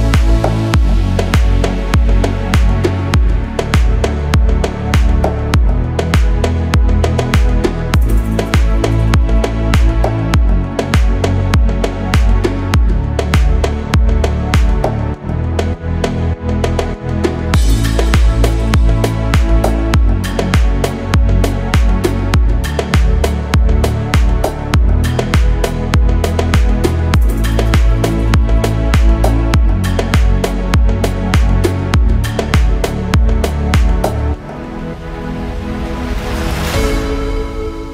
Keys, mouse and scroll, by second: 0.0 click, 1.0-2.0 middle drag, 2.2 click, 2.4 middle click, 3.5 click, 4.8 KP_1, 5.7 shift+middle click, 6.6 click, 7.5 g, 8.3 click, 8.9 click, 9.1 g, 9.6 click, 10.1 click, 10.3 g, 10.9 click, 11.5 click, 11.6 g, 12.6 click, 13.2 click, 13.4 g, 14.2 click, 15.2 click, 15.6 scroll down 1, 16.2 Tab, 16.2 scroll down 1, 16.5 middle click, 17.5 Tab, 18.2 click, 18.4 middle click, 19.2-20.3 drag, 20.5-21.7 middle drag, 22.1 scroll down 1, 22.5 shift+middle click, 23.2-24.2 middle drag, 24.2 KP_1, 24.7-25.2 scroll up 1, 26.2 click, 26.7 shift+middle click, 27.3 click, 28.5 b, 30.1-32.7 right drag, 32.7 scroll down 1, 33.0 shift+middle click, 34.4 click.